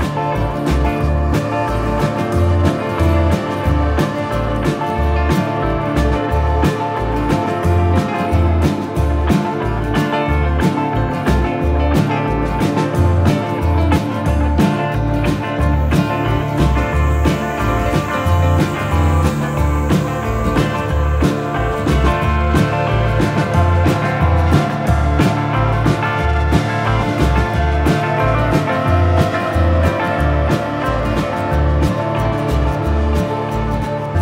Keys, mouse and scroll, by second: 0.9 middle click, 3.3 click, 4.9 middle click, 8.4 click, 10.5 click, 12.4 click, 12.5 middle click, 13.5 middle click, 14.0-15.0 scroll up 1, 15.0-15.3 scroll up 1, 15.3 middle click, 16.1 click, 17.1 middle click, 17.8 middle click, 18.6 click, 20.7 middle click, 21.3 middle click, 22.5 click, 23.7 click, 24.8 click, 27.1 click, 28.4 click, 29.0 shift+e, 29.7 Return, 30.1 middle click, 31.0 middle click, 31.2 click, 32.7 click, 32.9 middle click, 33.7 click.